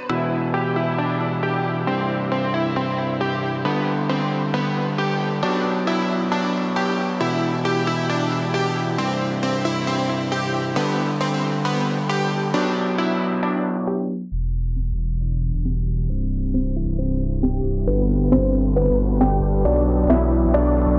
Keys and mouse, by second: 0.0 1, 0.2 click, 1.5 `, 3.4 g, 5.6 alt+middle click, 7.3-9.5 middle drag, 10.2 click, 11.2 shift+click, 11.7 click, 14.3 click, 15.0 shift+click, 16.5 j, 17.2 click, 17.7 shift+click, 18.3 click, 20.4 click, 20.8 shift+click.